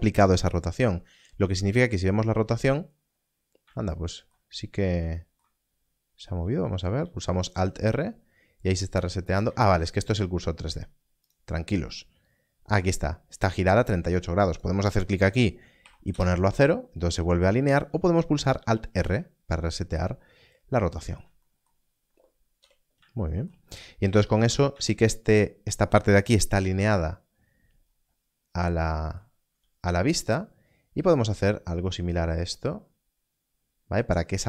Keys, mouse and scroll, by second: 3.5 n, 7.0 alt+r, 9.4 ctrl+z, 14.4 ctrl+z, 15.7 click, 16.0 Return, 17.6 ctrl+z, 18.9 alt+r, 21.8 scroll down 1, 22.5 n, 24.4 Tab, 26.5 KP_1, 27.8 scroll up 1, 29.4 g.